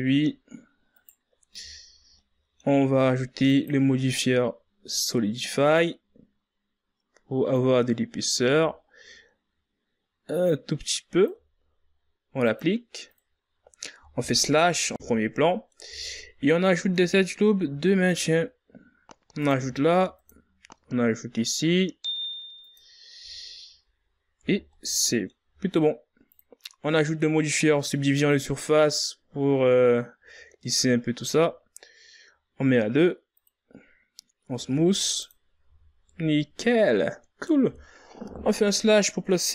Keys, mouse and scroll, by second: 0.9 right click, 1.8 shift+scroll up 3, 2.1-3.4 middle drag, 3.4-6.4 drag, 7.5-10.5 drag, 12.4-14.7 drag, 14.7 KP_Divide, 15.9 scroll down 2, 16.1-16.6 middle drag, 16.6 Tab, 17.1-18.4 middle drag, 18.4 ctrl+r, 20.5 ctrl+r, 25.1 Tab, 25.4-27.0 middle drag, 27.0-29.8 drag, 29.8-32.8 middle drag, 34.1-35.3 drag, 35.3 w, 36.4 a, 36.6 scroll down 2, 36.8-39.0 middle drag, 39.0 KP_Divide.